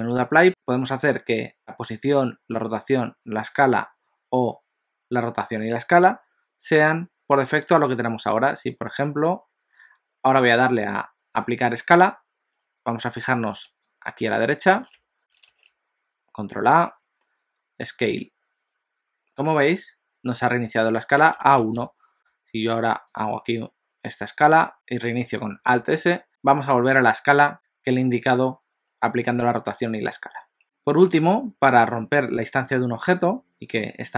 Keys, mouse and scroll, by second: 15.5 ctrl+a, 22.1 alt+s, 25.8 alt+s, 34.0 click.